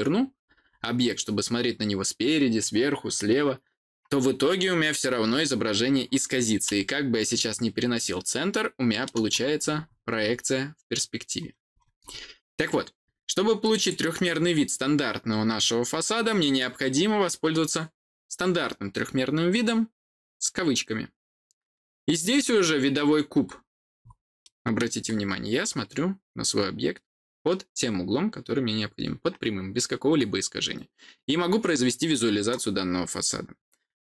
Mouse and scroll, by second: 0.6 scroll down 2, 6.8-9.0 middle drag, 9.3-10.4 scroll down 6, 11.3 middle click, 11.6-12.0 scroll down 4, 13.5 click, 13.7 click, 22.2 click, 23.9 scroll down 2, 24.3 middle click, 25.0-29.6 scroll down 2, 29.6-31.2 scroll down 1, 31.2-34.0 scroll down 1.